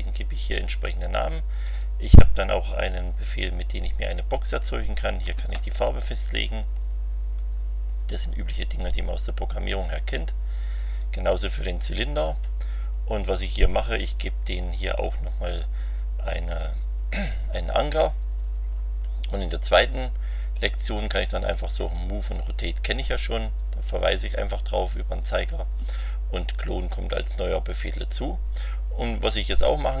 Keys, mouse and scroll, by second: 10.7 scroll down 2, 12.9 scroll up 2, 18.3-19.8 scroll down 6, 29.5 scroll down 2.